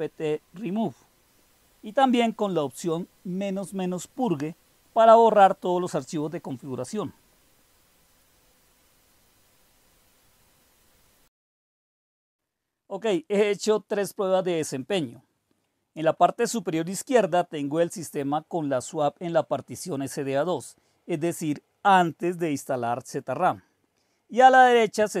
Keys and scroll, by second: 0.0-0.1 typing, 0.1 Delete, 0.2 Delete, 0.4 Delete, 2.0 Right, 3.8-6.5 typing, 6.5 Right, 6.8 Right, 7.2-8.6 Right, 8.6 typing.